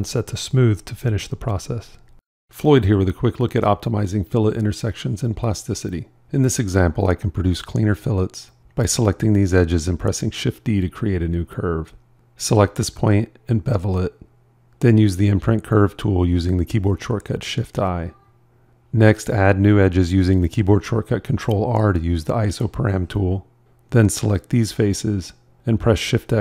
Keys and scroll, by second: 10.2 shift+d, 13.1 b, 15.3 shift+i, 20.4 ctrl+r.